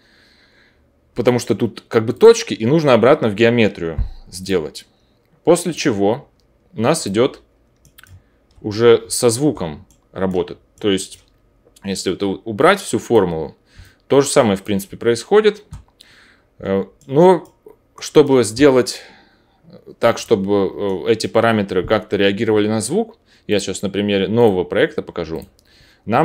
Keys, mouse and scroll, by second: 2.2-4.3 drag, 4.4-5.6 drag, 7.1-12.5 drag, 20.2-23.5 drag.